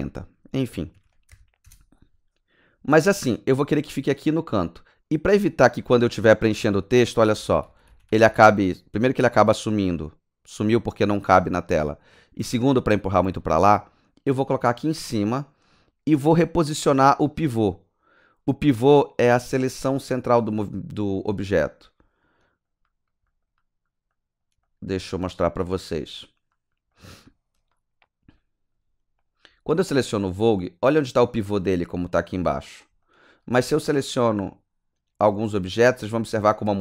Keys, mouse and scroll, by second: 0.7 KP_Subtract, 0.9 KP_4, 1.3 KP_0, 1.6 KP_Enter, 6.4 click, 7.0 click, 7.1-8.8 typing, 19.6 click, 20.3 click, 21.1 click, 22.4 alt+middle click, 22.8 alt+right click, 23.3 alt+middle click, 23.6 alt+right click, 24.1 alt+middle click, 24.6 alt+middle click, 25.0 alt+middle click, 25.3 alt+right click, 26.1 alt+middle click, 26.5 alt+right click, 26.9 alt+middle click, 27.3 alt+click, 27.7 alt+right click, 28.4 alt+middle click, 29.2 click, 29.6 alt+middle click, 33.0 alt+middle click, 33.3 typing, 33.6 click, 34.8 typing, 36.0 right click, 36.2 middle click, 36.6 typing, 36.7 right click.